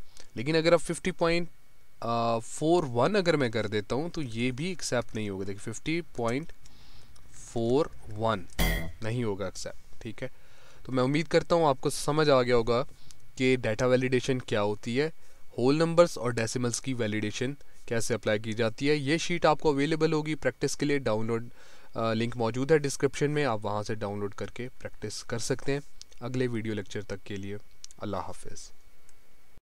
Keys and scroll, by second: 12.3 Escape.